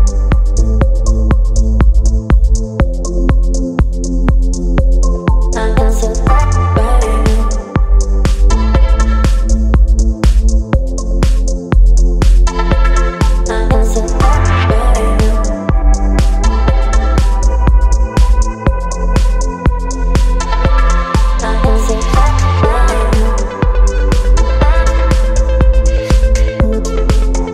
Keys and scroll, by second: 0.0 Right, 0.7 Right, 4.0 ctrl+t, 7.7 Return, 9.2 space.